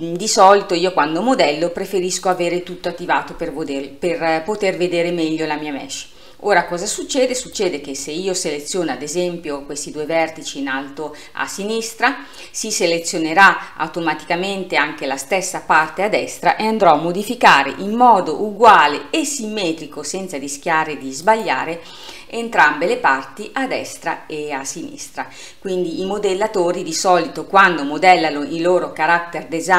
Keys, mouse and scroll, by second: 2.3 click, 4.0 scroll up 2, 7.6 click, 16.6 g.